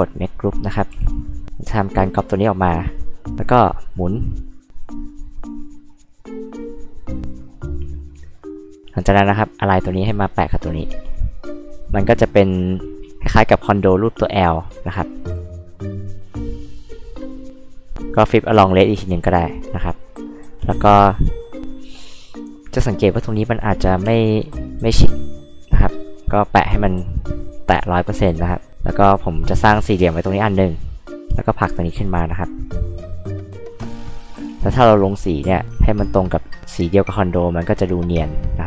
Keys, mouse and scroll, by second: 0.2 click, 0.9 h, 1.9 ctrl+click, 4.7 click, 6.2 click, 7.3 click, 9.2-11.8 drag, 15.4 right click, 17.6 click, 24.1 m, 24.7 click, 28.2 r, 29.1 click, 31.3-32.6 drag, 34.3 b, 35.6 click, 36.2 click.